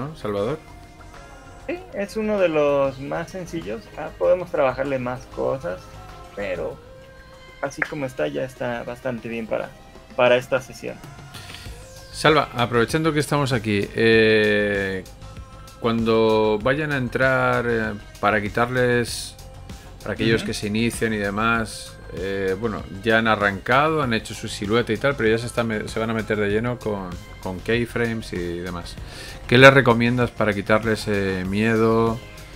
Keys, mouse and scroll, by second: 0.4 shift+middle click, 1.0 middle click, 2.0 middle click, 2.8 middle click, 4.0 KP_1, 11.6 Escape, 26.2 shift+middle click.